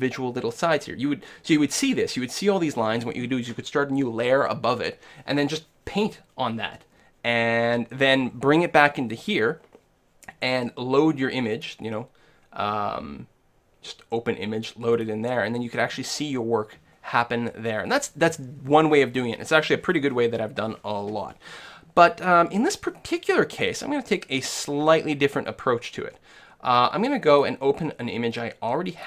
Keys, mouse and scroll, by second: 11.6-13.4 drag, 27.3-29.0 drag.